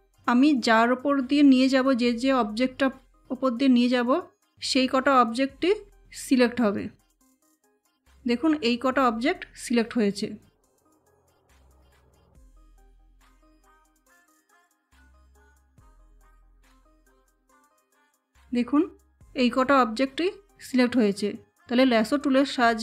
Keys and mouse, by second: 0.0 ctrl+z, 0.2-9.6 drag, 12.4 ctrl+Num_Lock, 12.7 ctrl+z, 14.1-22.8 drag.